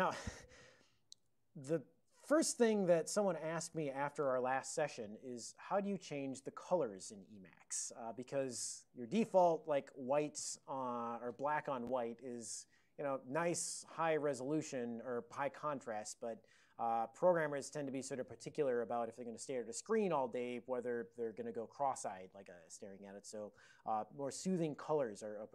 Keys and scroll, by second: 1.2 Tab, 9.3 super+j.